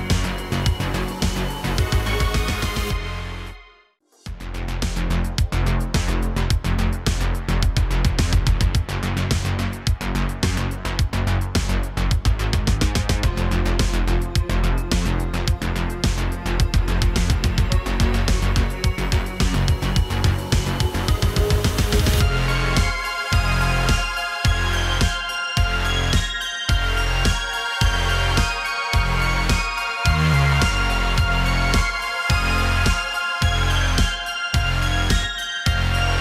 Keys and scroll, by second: 2.7 Tab, 3.3 r, 5.5 r, 7.0 a, 7.2 g, 8.0 y, 9.7 g, 9.8 y, 10.5 Tab, 23.7 Tab, 24.3 g, 24.5 y, 26.5 g, 26.7 z, 27.8 g, 28.0 x, 28.4 y, 30.8 r, 31.7 s, 33.0 s, 34.0 s, 35.2 g, 35.3 y.